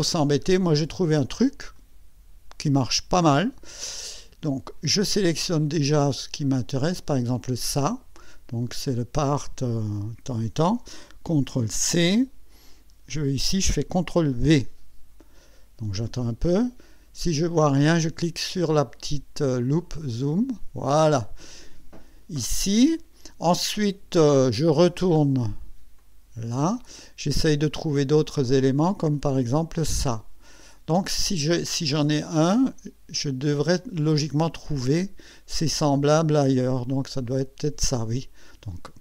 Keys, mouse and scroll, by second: 1.8 click, 4.1 click, 7.5 click, 11.5 ctrl+c, 13.1 click, 14.3 ctrl+v, 19.6 click, 26.0 click, 29.1 click, 37.2 click.